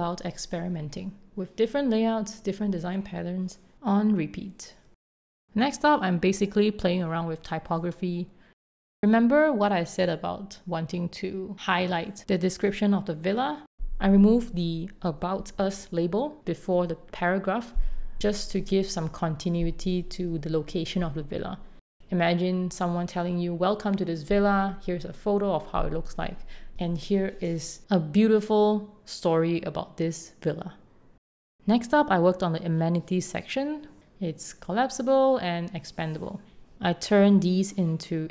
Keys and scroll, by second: 2.5 super+c, 5.2 shift+b, 5.6 o, 7.0 super+x, 7.2 BackSpace, 11.5 BackSpace, 17.8 alt+Down, 22.8 super+s, 26.1 shift+a, 26.7 6, 27.2 Return, 28.3-31.5 typing, 33.9 8, 34.0 Return, 34.6 Return, 36.1 alt+super+v, 36.8 super+z, 37.0-38.3 typing.